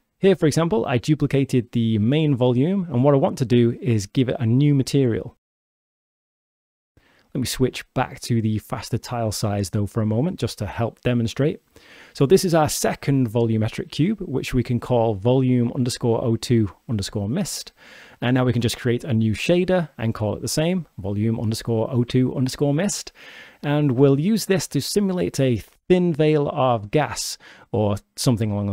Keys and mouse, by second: 2.9 s, 8.0 click, 9.2-10.5 drag, 12.5 click, 16.8 click, 18.1 click, 18.3-19.6 drag, 19.6-20.8 shift+middle drag, 23.6-24.8 drag, 26.2 click.